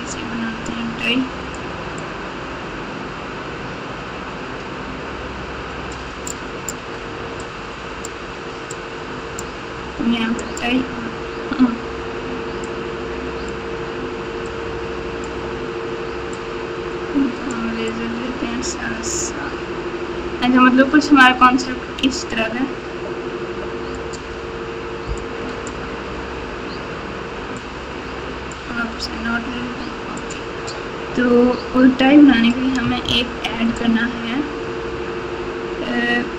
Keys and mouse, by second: 1.9-6.0 drag, 6.2 click, 7.4 click, 8.7 click, 10.3 click, 12.6 click, 14.4 click, 16.4-17.5 drag, 17.8-23.9 drag, 25.1 click, 27.6 click, 30.2 click, 33.6 shift+a.